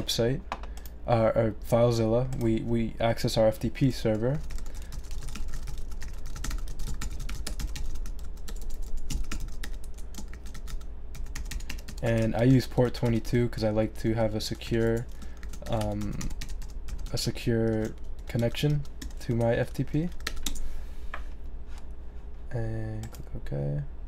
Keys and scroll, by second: 4.1-10.1 typing, 20.1 2, 20.4 Return, 22.2-23.0 typing.